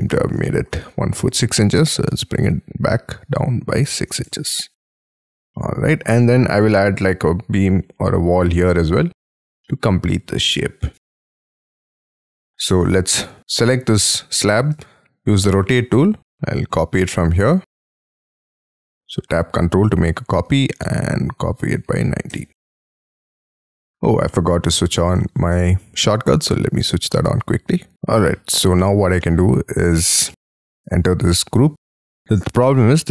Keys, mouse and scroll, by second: 29.2 middle click, 30.1 space, 30.9 double click, 31.3 double click, 31.7 middle click.